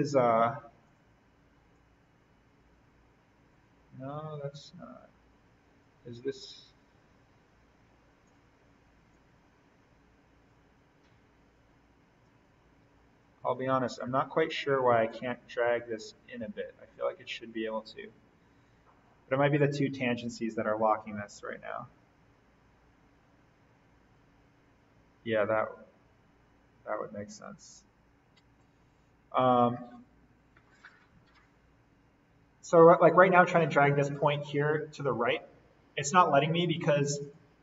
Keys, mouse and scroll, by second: 0.8-12.5 drag, 12.5-13.0 scroll up 1, 13.0-14.3 scroll down 1, 15.1-20.1 drag, 20.1-20.8 scroll up 1, 21.2-22.2 scroll down 1, 22.2-22.5 scroll up 1, 22.5-24.7 scroll down 1, 27.2-28.6 scroll up 1, 28.6-35.9 drag, 36.0-37.2 scroll down 1, 37.2 click.